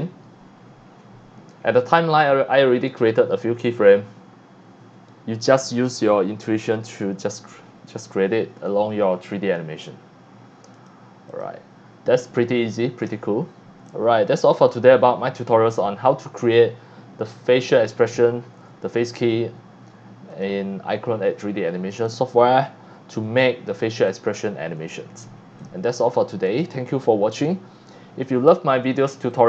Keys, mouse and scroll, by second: 9.1 right click, 9.7 scroll up 1, 10.7 click, 11.3 click, 12.3-12.8 scroll down 2, 13.8 c, 13.9-14.4 drag, 20.3 click, 21.9 click, 22.9 scroll up 1, 23.3-24.0 scroll down 2, 24.0 x, 24.1-25.6 drag, 26.5 click, 28.6 scroll up 1, 29.0 scroll down 1, 29.3-29.4 drag.